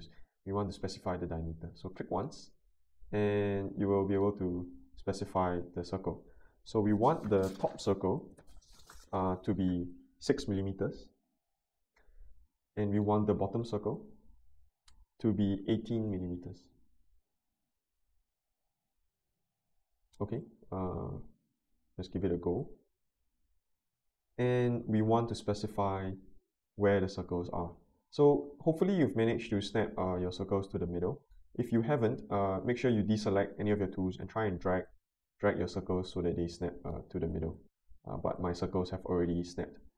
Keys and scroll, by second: 10.3 6, 10.7 Return, 15.5-16.3 typing.